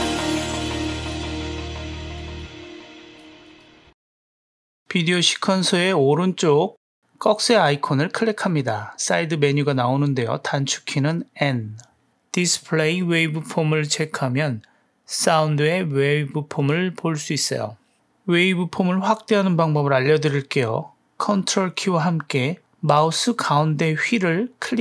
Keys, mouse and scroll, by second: 3.9 space, 9.8 click, 11.5 n, 12.7 n, 20.2-21.3 ctrl+middle drag, 21.3 ctrl+right click, 21.4-24.8 ctrl+middle drag, 21.6 ctrl+right click.